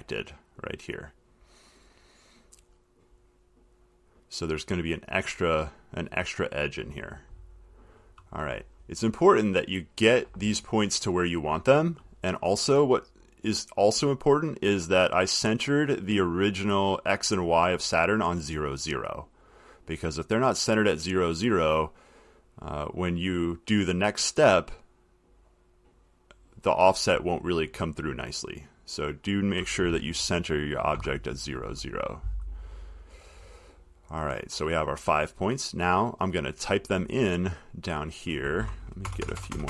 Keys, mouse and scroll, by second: 4.3 click, 8.9-11.0 scroll, 11.0-11.5 scroll, 13.2 click, 15.8 click, 16.7 click, 19.7 click, 26.5 click, 29.3 click, 31.0 click, 31.2 0, 33.3 click, 33.7 middle click, 33.8 middle click, 35.2 middle click, 36.1 click, 36.7 middle click, 36.8 middle click, 38.1 middle click, 38.5 click, 39.3 Return, 39.4 Return.